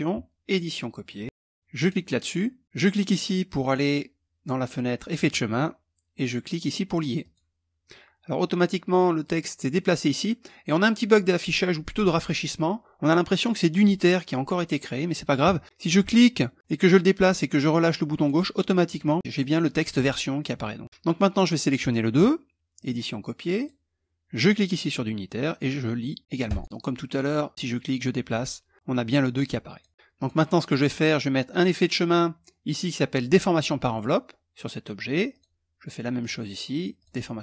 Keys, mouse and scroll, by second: 0.0 click, 0.7 click, 1.4 click, 4.7 click, 6.8 click, 15.6-18.2 drag, 18.6 click, 21.2 click, 22.3 click, 23.1 click, 23.9 click, 26.2 click, 27.5 click, 28.6-29.7 drag, 29.9 click, 31.1 click, 33.1 click, 34.9 click, 35.7 click, 36.5 click.